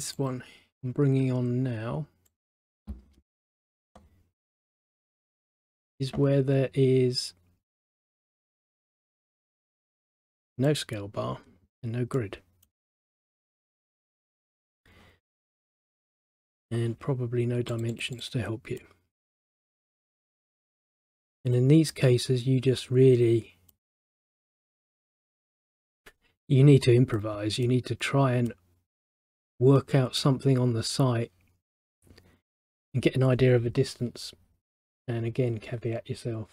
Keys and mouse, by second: 0.3 click, 2.4 click, 5.4 middle click, 7.9 click, 9.9 click, 10.8 middle click, 12.3 middle click, 15.7 click, 17.9 click, 18.1 click, 18.9 middle click, 20.4 middle click, 21.7 middle click, 23.8 middle click.